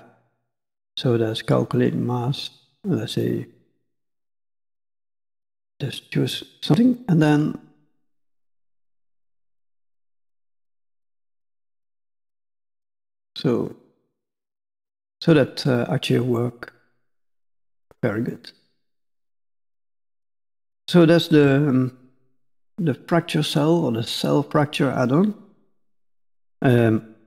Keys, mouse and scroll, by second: 4.4 middle click, 5.1 click, 5.6 middle click, 7.3 click, 8.6 click, 12.7 click, 13.2 middle click, 14.1-14.8 scroll up 4, 14.9 shift+middle click, 15.7-16.1 scroll down 2, 15.9 middle click, 17.3 middle click, 18.3 middle click, 18.9 scroll up 2, 19.4 shift+middle click, 20.0 middle click, 20.9 shift+middle click.